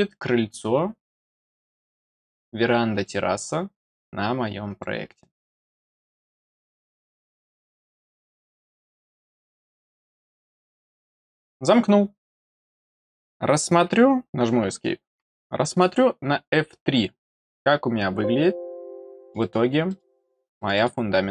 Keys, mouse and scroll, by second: 1.3 click, 2.9 click, 4.6 click, 5.9 click, 7.3 click, 9.1 click, 17.4-17.8 scroll down 1, 18.7-19.2 scroll down 4, 19.2 middle click, 19.3 middle click, 19.8 middle click, 20.0 middle click, 20.5 middle click, 20.7 middle click.